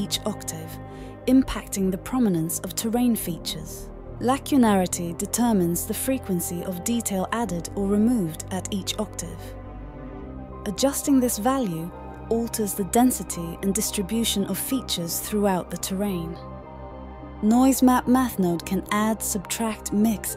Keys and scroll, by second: 8.9-9.6 typing, 18.2-18.9 typing.